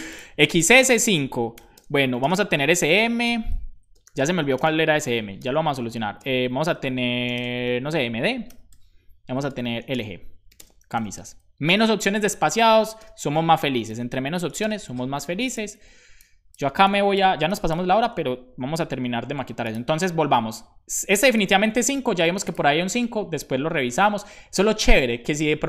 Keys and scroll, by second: 1.5 /, 1.7 ,, 1.7 Return, 2.2 space, 2.5 s, 4.1 space, 5.3 BackSpace, 7.3-9.1 typing, 9.1 Right, 9.8 Return, 10.2-11.4 typing, 12.4 shift+Up, 12.9 space, 13.1 ,, 14.5 Left, 14.5 space.